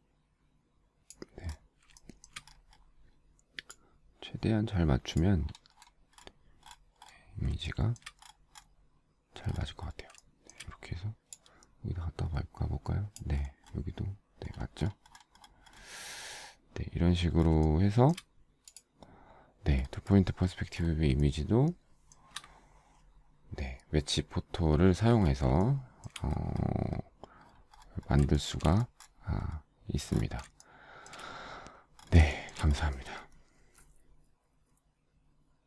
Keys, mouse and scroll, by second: 2.1 shift+middle click, 7.8 shift+middle click, 10.5 shift+middle click, 17.8 shift+middle click, 21.3 shift+middle click, 25.7 shift+middle click, 28.5 shift+middle click, 30.7 shift+middle click, 32.4 shift+middle click, 32.6 shift+middle click.